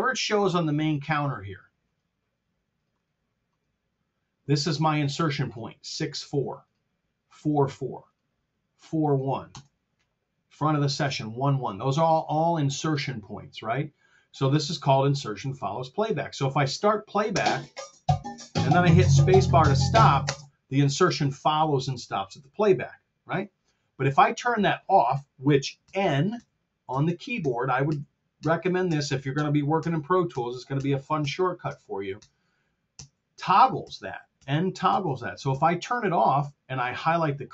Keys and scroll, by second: 9.4 Return, 17.3 space, 20.2 space, 25.8 n.